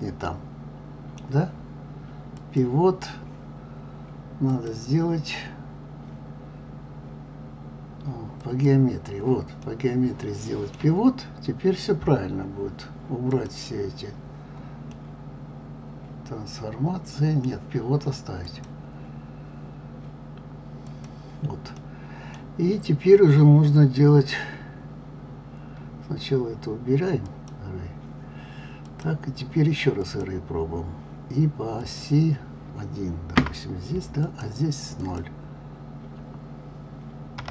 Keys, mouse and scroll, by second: 2.3 click, 4.5-7.5 drag, 9.6-12.6 middle drag, 13.3 click, 14.9-17.9 middle drag, 18.4-21.5 drag, 21.8-24.8 middle drag, 27.3 click, 28.9-34.4 drag, 35.0-37.5 drag.